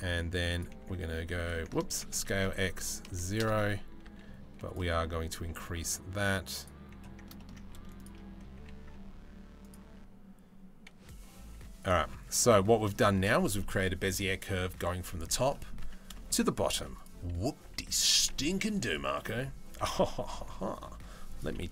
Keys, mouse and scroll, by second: 0.4 e, 1.5 ctrl+z, 1.8 s, 3.7 s, 5.1 g, 7.0-10.7 ctrl+middle drag, 10.7 r, 12.0 Tab, 12.0-12.4 middle drag, 12.6 shift+middle drag, 13.2 middle drag, 15.1 middle drag, 15.4 Tab, 15.8 shift+middle click, 16.6 click, 17.2 z, 18.1 KP_Decimal, 18.8 middle click, 19.3 a, 21.6 Delete.